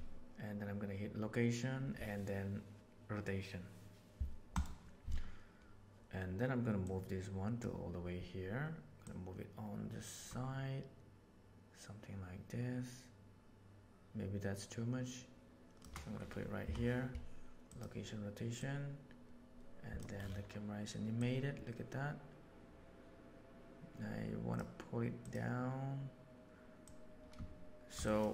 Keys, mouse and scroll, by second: 6.8 click, 9.0-15.8 middle drag, 18.6-20.0 right drag, 21.2-21.9 right drag, 21.9-24.5 drag, 25.2 click, 26.8-27.9 drag, 28.0 click.